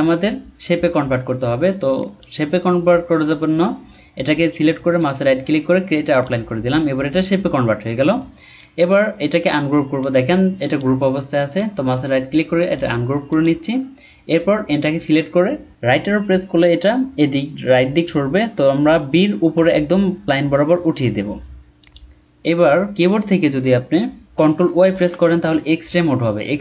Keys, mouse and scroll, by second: 5.0 right click, 11.8 right click, 15.8 Right, 20.4 Right, 21.6-22.1 alt+scroll up 1, 22.2-24.0 scroll up 1, 24.8 ctrl+y.